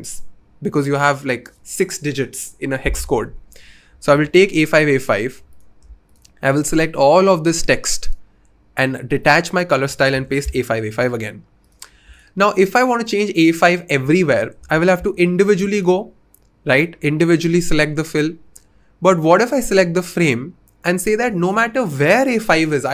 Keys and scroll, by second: 4.1 super+c, 10.1 super+v, 10.4 Return.